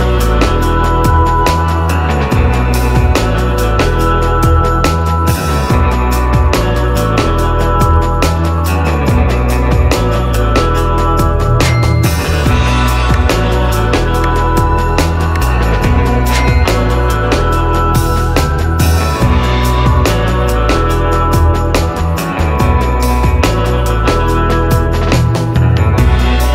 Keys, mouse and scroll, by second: 0.5 middle click, 5.4 middle click, 5.5-13.2 drag, 13.4 Right, 14.4-26.5 drag.